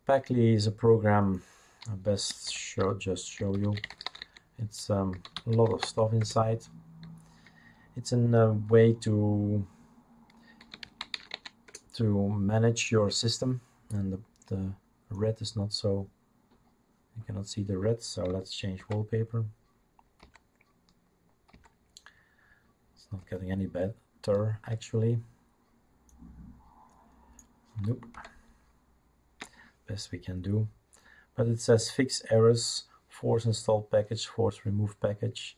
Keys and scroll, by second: 3.3-6.2 typing, 10.5-11.6 typing, 11.7 Return, 18.8 alt+Right, 20.4 alt+Right, 21.5 alt+Right, 23.2 alt+Right, 28.2 alt+Right.